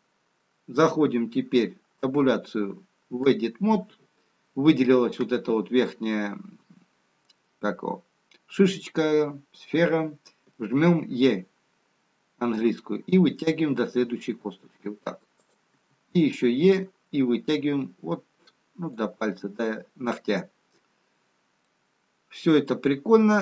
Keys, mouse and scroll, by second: 2.2 Tab, 6.0-8.9 scroll up 3, 8.9-9.8 scroll down 3, 15.7 e, 21.6 middle click.